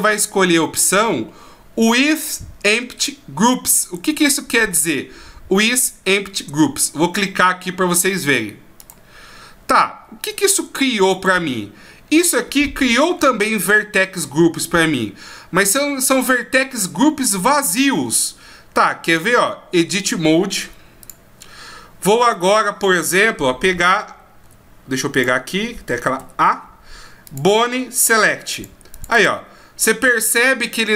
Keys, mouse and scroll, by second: 11.1 right click, 12.5-14.3 scroll up 8, 14.3-14.6 scroll up 4, 19.0 click, 21.1 click, 23.6 a, 24.4 a, 25.1 click, 26.2 a, 27.3 click, 28.5 click, 28.9 click, 29.1 click.